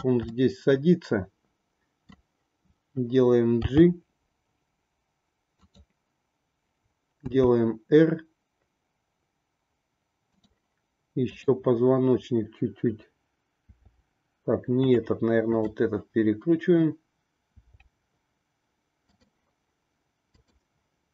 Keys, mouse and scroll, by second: 0.3-2.1 middle drag, 3.7 g, 7.2 r, 11.3-12.7 drag, 13.6 r, 15.5-16.9 drag, 17.4 r, 20.3-21.1 drag.